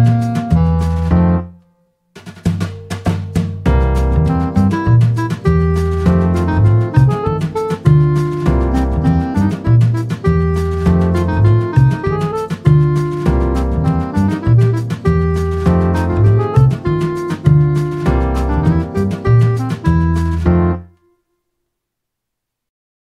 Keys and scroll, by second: 1.8-2.2 typing, 2.4 Return, 8.7 typing, 10.0 typing, 11.2 typing.